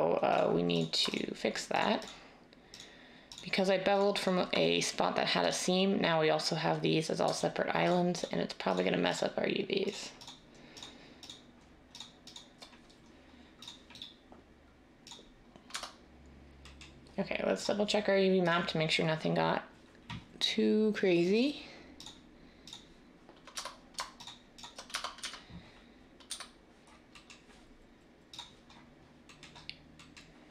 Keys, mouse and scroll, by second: 15.7 Tab, 23.5 Tab, 24.9 Tab, 25.2 typing, 26.2 a.